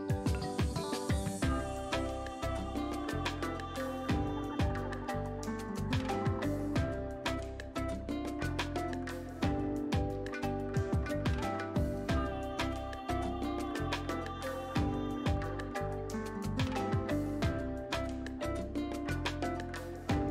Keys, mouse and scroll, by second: 0.1 click, 2.2 right click, 3.4 click, 7.7 click, 10.2 click, 18.4 click, 19.6 v.